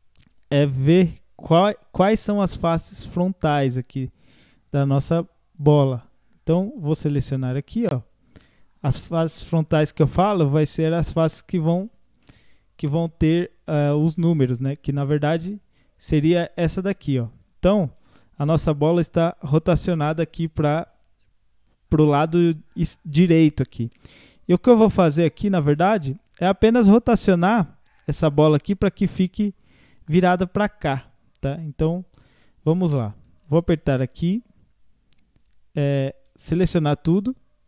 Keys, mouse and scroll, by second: 0.6-4.3 drag, 4.7-12.2 drag, 12.2-13.6 middle drag, 13.6-15.0 scroll up 3, 15.8 middle click, 16.5-18.3 drag, 18.3 KP_1, 33.3 a.